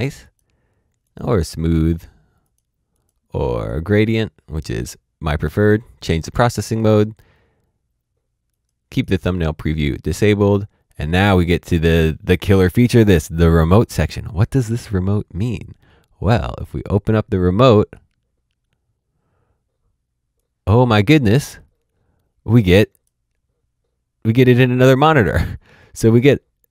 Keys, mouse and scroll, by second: 0.2 click, 8.5 click, 16.9 click, 20.3 click, 26.1 click.